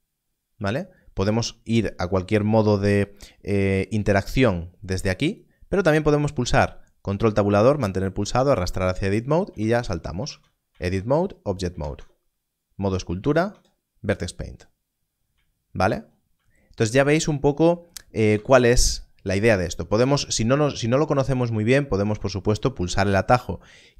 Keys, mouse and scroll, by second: 5.2 click, 7.1 ctrl+Tab, 9.5 ctrl+Tab, 10.2 ctrl+Tab, 10.7 ctrl+Tab, 11.7 ctrl+1, 12.0 ctrl+Tab, 13.2 ctrl+Tab, 18.3 ctrl+1, 21.4 ctrl+1.